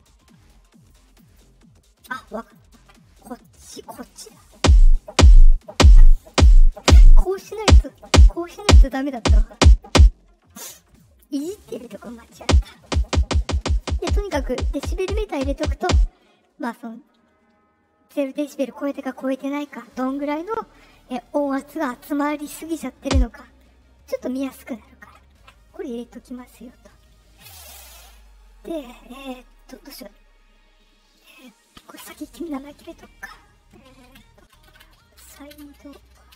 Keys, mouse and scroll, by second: 0.8 click, 1.2 right click, 2.3 click, 3.6 click, 10.8 right click, 11.7 click, 28.6 middle click, 28.6 scroll, 29.5 click, 34.1-36.3 typing.